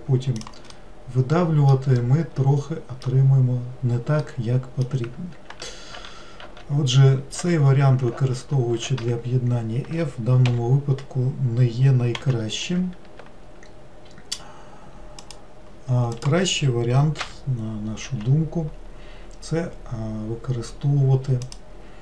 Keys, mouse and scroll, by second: 0.8-3.3 middle drag, 3.3-4.2 scroll down 2, 4.2-5.5 middle drag, 5.5 ctrl+z, 5.9 ctrl+z, 7.4 ctrl+z, 8.2 ctrl+z, 10.5 l, 12.2 x, 16.2 click, 17.3 l, 18.1 x.